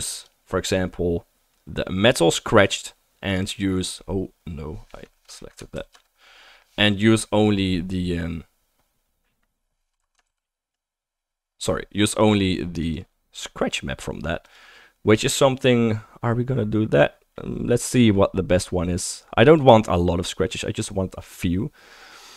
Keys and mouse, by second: 0.2 middle click, 0.5-9.9 right drag, 3.6 typing, 5.9 ctrl+z, 9.9-12.2 ctrl+drag, 10.4 ctrl+z, 13.5 middle click, 13.7-14.2 middle drag, 14.5-15.2 drag, 15.2-22.3 right drag.